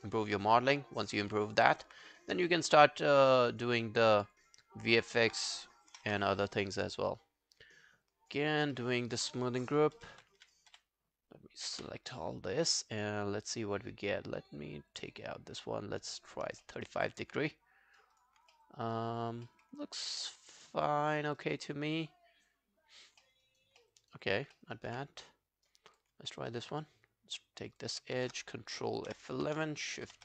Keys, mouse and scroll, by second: 0.1 alt+click, 0.4 right click, 1.7 alt+right click, 4.4 double click, 4.9 alt+middle click, 5.1 alt+right click, 5.9 ctrl+F11, 8.1 alt+click, 8.5 alt+right click, 8.8 alt+middle click, 9.0 alt+right click, 9.9 alt+Right, 10.2 shift+., 10.4 shift+., 10.7 shift+., 11.8 shift+., 16.7 alt+middle click, 16.9 alt+right click, 17.1 alt+click, 17.5 right click, 18.5 alt+middle click, 18.8 alt+right click, 19.5 alt+middle click, 19.8 alt+scroll down 3, 20.0 alt+click, 21.4 alt+right click, 21.7 alt+click, 23.2 alt+middle click, 23.5 alt+right click, 23.8 alt+middle click, 24.0 alt+right click, 24.2 alt+click, 24.6 alt+middle click, 24.8 alt+right click, 26.3 alt+middle click, 26.5 alt+right click, 27.9 double click, 29.1 ctrl+F11, 30.1 shift+..